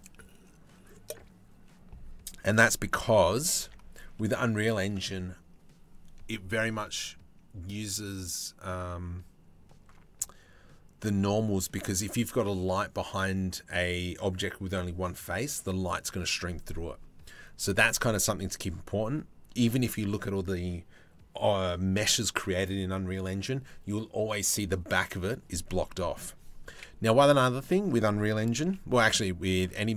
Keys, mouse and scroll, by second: 2.4 g, 3.2 Tab, 3.8 middle click, 25.5 middle click, 26.4 KP_7, 28.2 g.